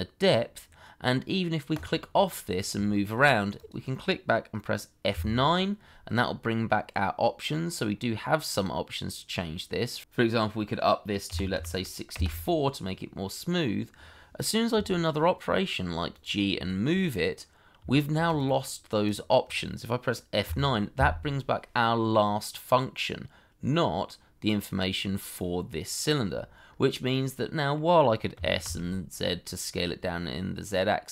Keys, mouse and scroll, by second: 2.1 middle click, 2.8 shift+middle click, 5.1 F9, 10.0 BackSpace, 11.2 6, 11.5 4, 12.1 Return, 14.7 g, 16.7 shift+middle click, 17.0 middle click, 17.9 shift+middle click, 18.6 middle click, 20.4 F9, 26.6 scroll up 1, 27.1 middle click, 28.3 s, 28.6 z.